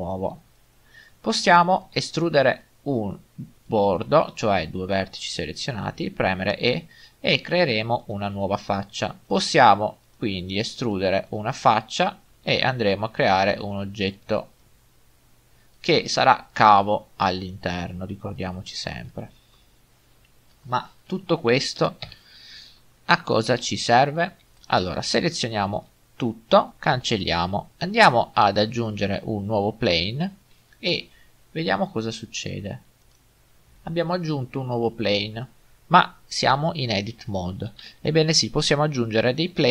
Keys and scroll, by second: 6.2 typing, 12.4 e, 22.0 7, 25.5 typing, 27.0 Delete.